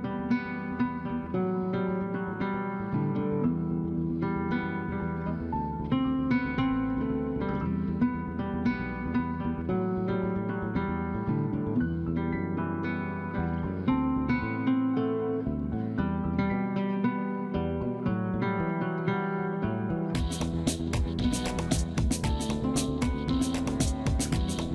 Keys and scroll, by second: 7.2 F3, 8.4 F2, 10.9-11.7 typing, 13.9 2, 14.1 Return, 18.0 F2, 24.4 space.